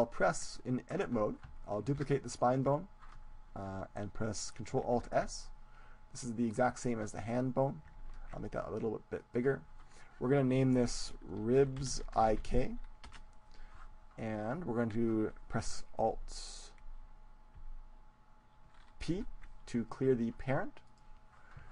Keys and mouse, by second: 2.1 shift+d, 2.7-4.6 right drag, 5.9 ctrl+alt+s, 7.0-8.9 drag, 8.5 ctrl+alt+s, 9.3-12.3 drag, 19.1 alt+p.